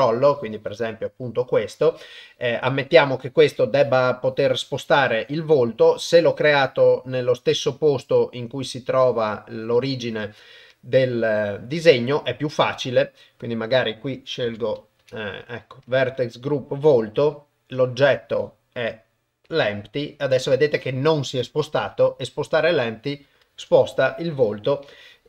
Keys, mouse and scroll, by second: 10.8-12.0 drag, 13.5-16.0 drag, 21.9 g.